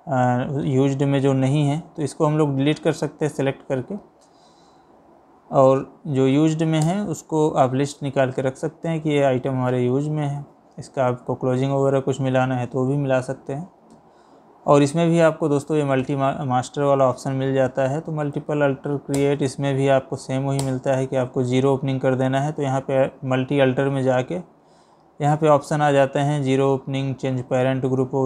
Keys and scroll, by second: 0.7 Escape, 6.4 Down, 18.4 Down.